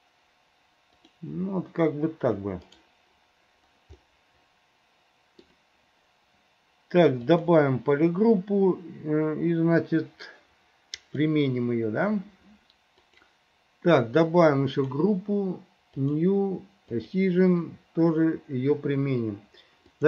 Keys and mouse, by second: 4.1-5.6 middle drag, 7.4 click, 11.2 click, 14.8 click, 16.1 click, 17.3 click.